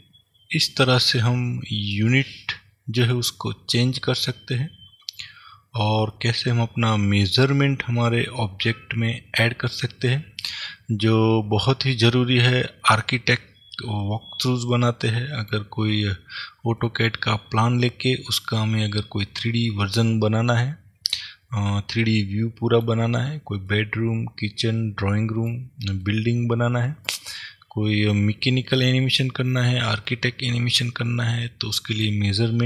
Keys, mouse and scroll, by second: 12.1 middle click, 16.4-16.9 scroll down 1, 16.9 middle click, 18.9-32.6 middle drag.